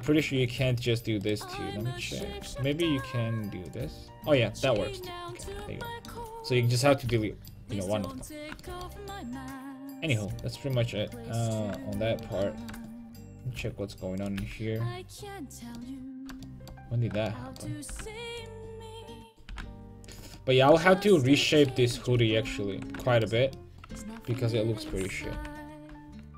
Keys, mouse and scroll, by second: 2.5 x, 4.8 a, 5.2 middle click, 5.5 Tab, 6.3 Tab, 7.1 a, 11.8 middle click, 14.2 right click, 14.4 g, 15.8-17.5 drag, 15.8 middle click, 18.4 g, 19.5 g, 21.9 ctrl+z, 22.1 ctrl+z, 22.5 ctrl+z, 25.3 g.